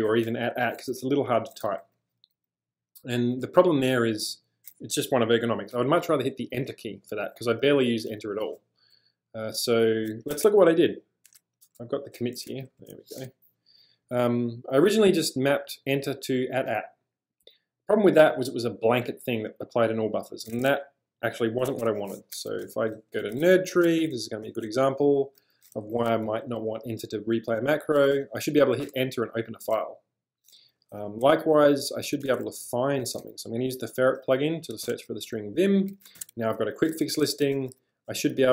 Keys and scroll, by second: 1.7 u, 1.9 u, 2.3 u, 3.4 u, 10.3 super+Tab, 12.5 shift+super+{, 21.7 super+Tab, 22.4-28.1 typing, 28.9 Return, 30.6 j, 30.8 j, 32.3-33.7 typing, 34.9 Return, 36.2 ctrl+j, 37.3-38.5 typing.